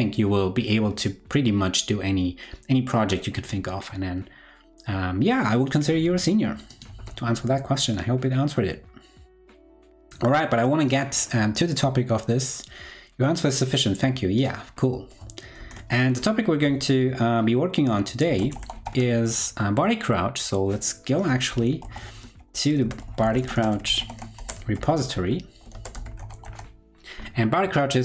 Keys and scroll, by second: 7.0 super+w, 15.6 super+t, 21.8 super+l.